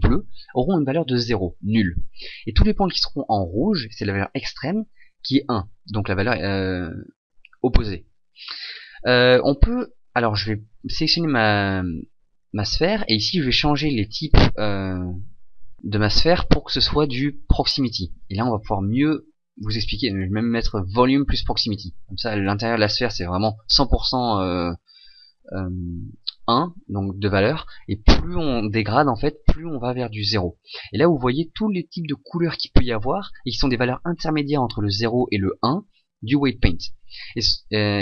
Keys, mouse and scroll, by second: 11.1 right click, 20.0 click.